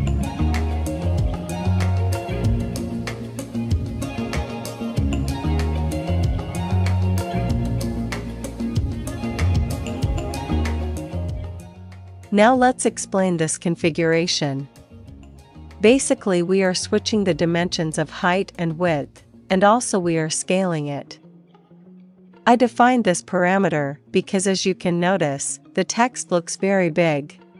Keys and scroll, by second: 0.0-0.1 typing, 2.0 super+s, 6.6-7.7 typing, 7.9 super+s.